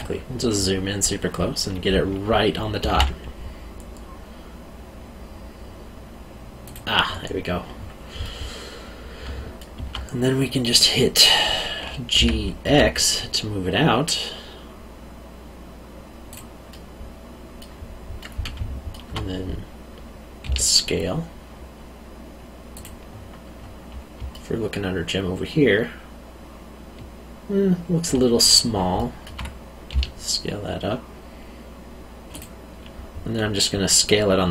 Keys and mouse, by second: 2.8 g, 2.9 z, 6.6 click, 8.2 middle click, 9.2 alt+middle click, 12.1 g, 12.6 x, 16.3 click, 16.7 middle click, 18.5 alt+middle click, 20.4 s, 22.7 click, 24.3 alt+middle click, 28.9 alt+middle click, 29.9 s, 32.3 click.